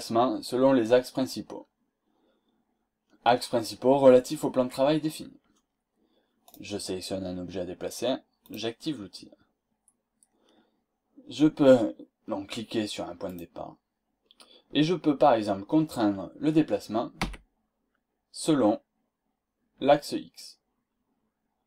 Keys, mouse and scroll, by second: 1.5-1.9 scroll down 2, 2.0-2.7 scroll up 2, 6.5 click, 8.5 click, 13.3 click, 15.3 scroll down 2, 17.2 x.